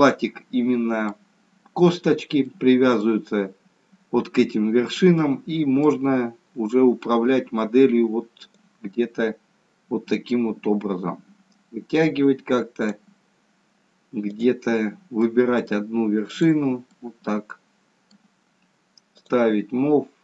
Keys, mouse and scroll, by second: 2.5 middle click, 3.6-5.0 scroll up 1, 5.0 middle click, 5.0-5.4 scroll up 1, 6.1-6.8 scroll down 2, 8.6 click, 14.3 click, 15.2 middle click, 16.4 click, 17.0 middle click, 19.1 click.